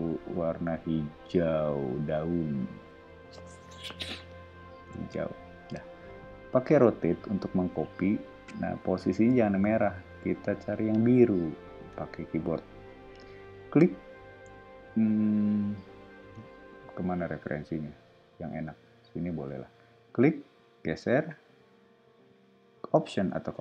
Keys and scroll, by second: 6.5 q, 9.4 Left, 9.9 Up.